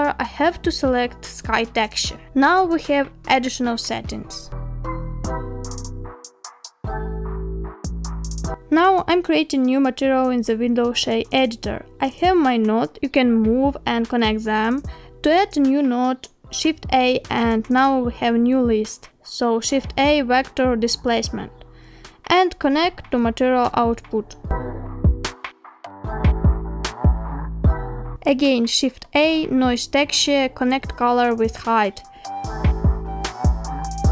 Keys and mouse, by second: 2.6-4.1 middle drag, 4.9 middle drag, 6.2 click, 7.3 click, 9.4 click, 10.7 shift+middle click, 11.3 shift+middle click, 12.1 click, 13.1 shift+middle click, 14.1 click, 15.4 click, 16.4 click, 16.9 click, 18.2 shift+a, 23.6 click, 24.8-26.1 drag, 26.9 click, 27.5 shift+a, 33.8 middle click.